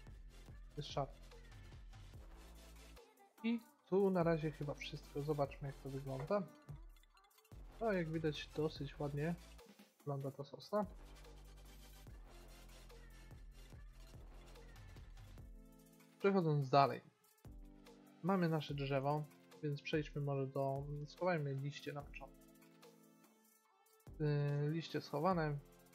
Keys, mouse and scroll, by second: 0.7 middle click, 6.3 a, 7.7-9.6 middle drag, 10.5-11.7 middle drag, 17.8 click, 18.7-19.9 middle drag, 20.1 Tab, 21.8 click, 22.3-24.0 middle drag, 24.2 middle click, 25.8-25.9 middle drag.